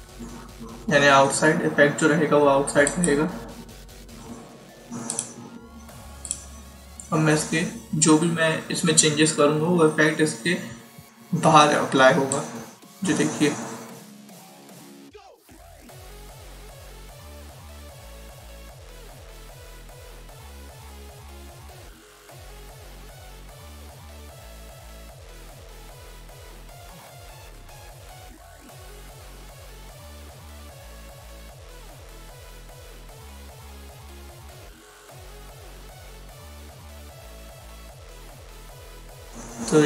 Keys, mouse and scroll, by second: 2.8 click, 12.2 click, 19.5 click, 23.9 click, 29.4 click, 30.8 click, 33.0 click.